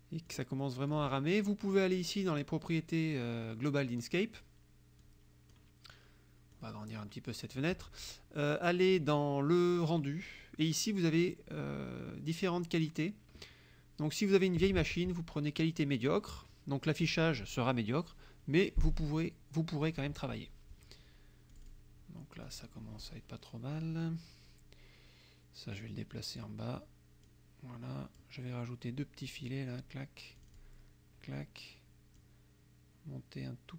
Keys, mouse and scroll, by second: 0.3 click, 3.2 click, 5.0 click, 6.6-7.8 drag, 8.8 click, 9.9 click, 19.9 click, 21.5 click, 22.5 click, 23.0-24.3 drag, 25.8 click, 27.3-28.5 drag, 29.3 click, 30.4 click, 32.3-33.7 drag.